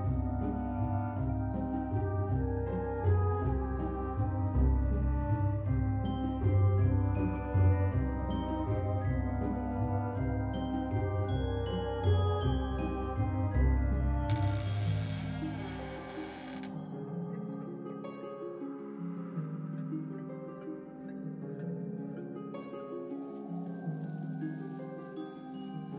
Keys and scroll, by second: 0.4 ctrl+c, 0.6 ctrl+v, 1.2 z, 1.8 alt+x, 9.5 ctrl+c, 9.7 ctrl+v, 10.5 alt+x, 12.4 ctrl+c, 12.6 ctrl+v, 13.2 x, 14.4 ctrl+c, 14.6 ctrl+v, 15.0 x, 15.8 ctrl+c, 16.1 ctrl+v, 20.5 space.